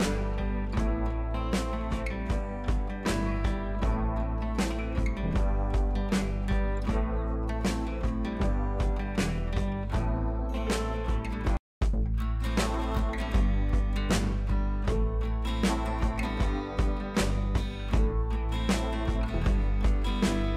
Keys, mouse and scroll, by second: 1.7 scroll up 1, 2.0-4.0 alt+drag, 4.0 ctrl+u, 4.6-7.6 drag, 8.7 ctrl+j, 9.4-14.0 drag, 14.0 scroll up 1, 14.6 ctrl+t, 15.3-20.5 alt+drag.